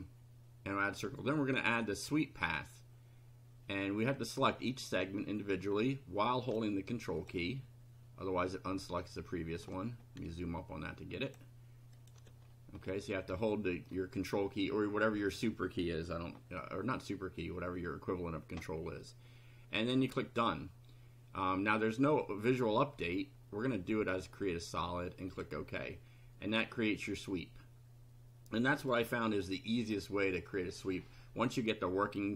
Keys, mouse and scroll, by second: 2.2 click, 5.4 click, 6.4 ctrl+click, 7.2 ctrl+click, 9.6-10.1 ctrl+scroll up 4, 11.2 ctrl+click, 12.0 ctrl+click, 12.4-13.0 ctrl+scroll down 4, 13.3-14.0 shift+middle drag, 20.2 click, 24.1 click, 25.3 click, 26.5-29.1 middle drag, 29.4 middle click, 29.5 click.